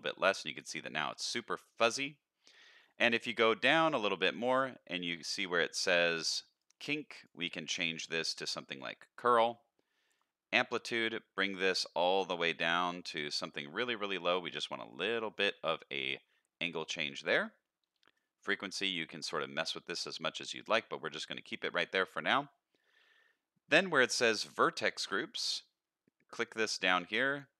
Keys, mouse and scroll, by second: 0.4-0.9 middle drag, 2.4-4.3 scroll down 7, 4.3 click, 5.6 click, 6.6 click, 7.1-8.8 drag, 9.2-10.0 scroll down 2, 10.2-15.5 shift+drag, 18.1-20.7 shift+drag, 21.4-22.6 scroll down 4, 24.5 click, 25.0-26.3 scroll down 3, 26.3-27.3 scroll down 3, 27.3-27.5 drag.